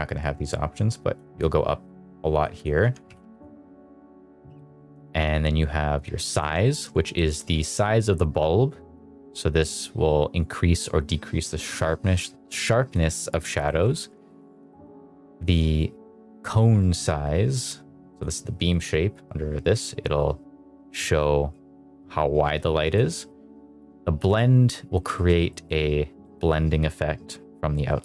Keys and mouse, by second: 0.4 click, 1.7 click, 2.4 click, 3.1 0, 4.3 middle click, 5.9 click, 6.5 shift+middle drag, 7.0 shift+middle drag, 8.9-12.9 drag, 13.6 shift+middle drag, 14.2 shift+middle drag, 14.6 shift+middle drag, 15.7-18.1 drag, 19.1-22.9 drag, 23.8-24.9 drag, 25.0 shift+middle drag, 25.4 middle click, 26.1 middle click.